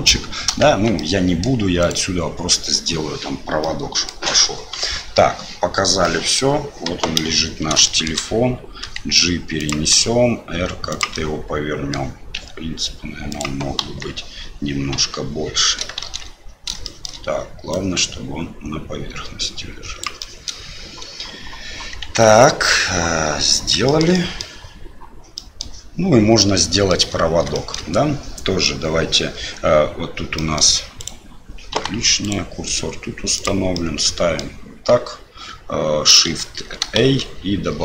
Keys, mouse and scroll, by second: 0.7 Tab, 0.9 middle click, 1.8 click, 3.6 middle click, 4.8 KP_Divide, 6.0 middle click, 6.8 KP_7, 7.8 shift+middle click, 8.8 g, 9.9 r, 11.3 middle click, 12.4 s, 13.7 KP_1, 14.9 KP_3, 16.0 shift+z, 16.9 shift+middle click, 17.8-20.2 drag, 20.3 middle click, 22.0 shift+z, 24.2 middle click, 25.4 middle click, 26.5 middle click, 27.6 shift+middle click, 30.5 middle click, 31.0 click, 31.7 Delete, 32.2 click, 33.7 middle click, 36.3 ctrl+shift+a, 36.9 shift+a.